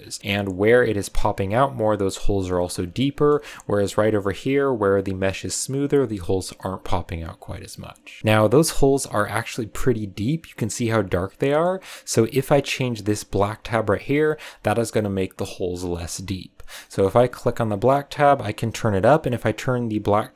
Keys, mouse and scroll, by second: 2.8-5.9 shift+middle drag, 8.2-9.7 shift+middle drag, 11.2 scroll down 1, 11.4-12.6 middle drag, 12.6-14.9 drag, 14.9-15.7 scroll down 1, 15.7-16.7 middle drag, 16.7 scroll down 1, 16.8 middle click, 17.4 click.